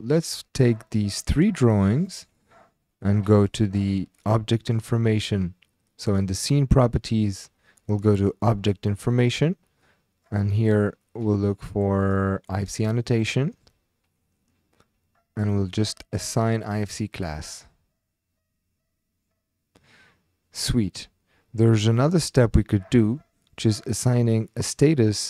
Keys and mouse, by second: 0.2 click, 0.5 click, 6.1 click, 8.5 click, 11.1-12.0 drag, 12.1-13.3 drag, 23.6-24.7 drag.